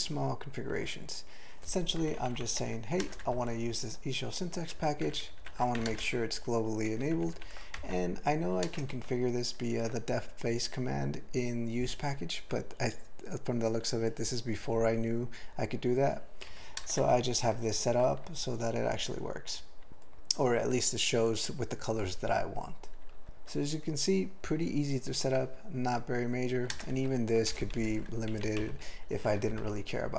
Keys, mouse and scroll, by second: 2.2 ctrl+n, 2.4 ctrl+n, 2.6 ctrl+p, 2.8 ctrl+e, 3.0 ctrl+space, 3.2 ctrl+alt+b, 4.7 ctrl+g, 5.1 ctrl+n, 5.2 ctrl+n, 5.4 ctrl+n, 5.8 alt+m, 5.9 ctrl+space, 6.0 ctrl+e, 6.9 ctrl+g, 7.1 ctrl+n, 7.3 ctrl+n, 7.8 alt+m, 8.7 ctrl+space, 8.9 ctrl+alt+f, 16.5 ctrl+g, 16.8 ctrl+space, 17.0 ctrl+alt+b, 17.5 ctrl+g, 26.7 ctrl+space, 26.9 ctrl+alt+f, 27.5 BackSpace, 27.8 ctrl+p, 28.0 ctrl+p, 28.1 ctrl+a, 28.3 ctrl+n, 28.6 ctrl+k, 29.3 ctrl+p, 29.4 ctrl+e, 29.6 ctrl+d.